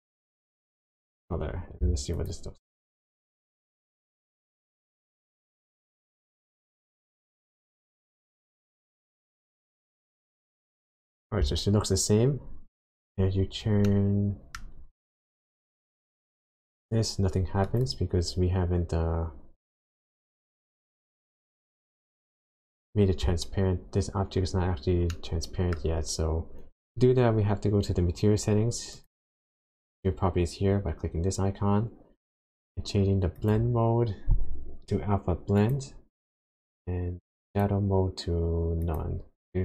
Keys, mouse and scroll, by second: 2.2 ctrl+shift+click, 5.4-6.0 scroll down 5, 6.9 click, 9.0-9.9 scroll up 5, 13.3-13.9 scroll up 4, 13.9 middle click, 14.8-15.1 scroll up 1, 15.9 click, 20.3 click, 22.7 click, 25.1 middle click, 26.0-27.2 scroll down 2, 28.9 click, 33.4 click, 37.5 click.